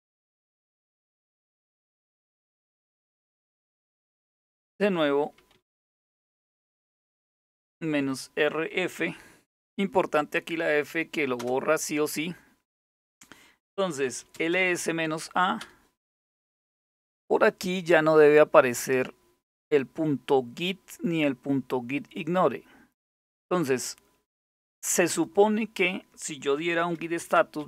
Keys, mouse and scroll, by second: 0.0-0.2 typing, 1.4 ctrl+c, 1.4 typing, 4.7-5.7 typing, 6.4 Up, 7.0 Left, 7.1 Left, 7.3 Left, 7.5 Left, 7.6 Left, 8.6 f, 11.0 Return, 13.5-14.9 typing, 15.2 Return, 16.9-17.7 typing, 17.1-20.8 scroll up 1, 21.8-22.3 scroll up 1, 22.3-23.0 scroll down 2, 23.0-24.7 scroll down 1, 24.7 click, 26.2-27.6 typing.